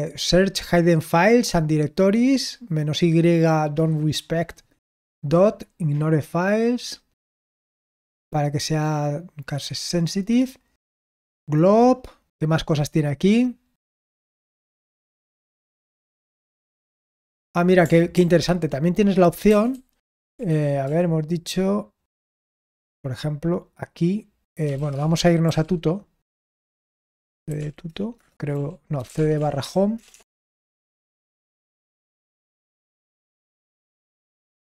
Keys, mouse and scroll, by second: 18.0 ctrl+p, 19.4 ctrl+c, 20.4 ctrl+p, 22.2 c, 24.4-25.4 typing, 26.5-30.4 typing, 31.0 ctrl+c, 31.4-34.6 typing.